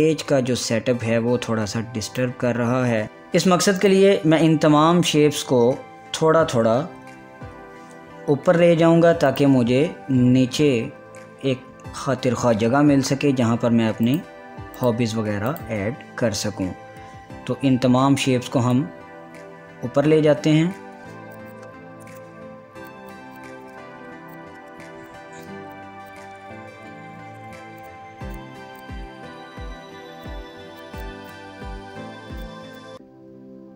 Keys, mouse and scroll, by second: 1.1 scroll down 1, 2.7 click, 3.0 ctrl+z, 3.5 scroll down 1, 4.4 click, 9.7 Up, 9.9 click, 10.9 Up, 14.7 click, 16.1 shift+click, 18.2 Up, 19.3 Down, 21.4 click, 21.8 Up, 22.1 Down, 23.0 click, 23.9 ctrl+d, 24.4 click, 24.7 ctrl+d, 25.1-26.4 drag, 26.4 Up, 27.6 ctrl+d, 27.9 click, 28.1 scroll down 1, 28.5 click, 29.1 Up, 29.5 Down, 30.3 click, 31.6 Up, 32.5-33.7 drag.